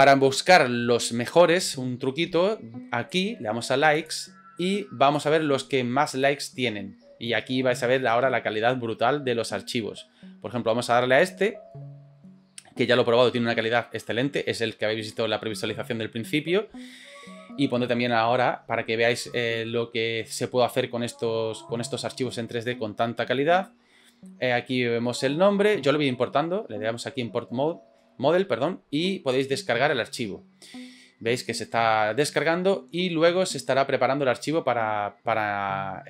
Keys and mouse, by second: 3.1-4.1 drag, 5.2-11.2 drag.